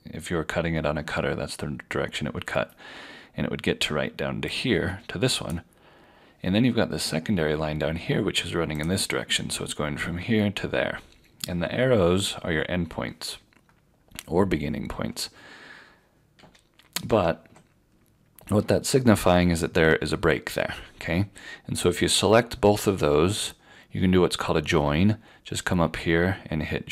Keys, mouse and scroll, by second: 6.6 click, 8.8 click, 16.4 ctrl+z, 17.1 ctrl+z, 21.9 click.